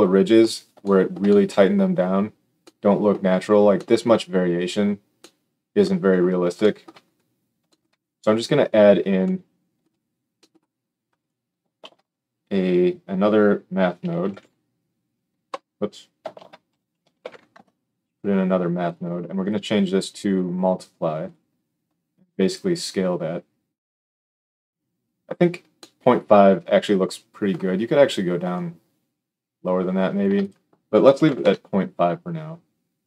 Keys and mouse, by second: 11.1 click, 11.8 shift+a, 16.3 shift+a, 19.3-33.0 drag.